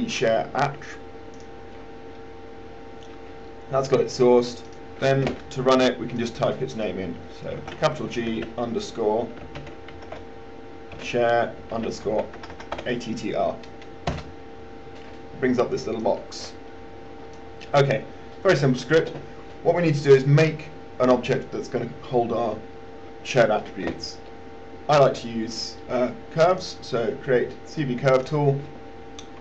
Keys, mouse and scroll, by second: 7.8 shift+g, 9.7-11.2 typing, 12.3-13.0 typing, 14.3 Return, 16.2-17.7 drag.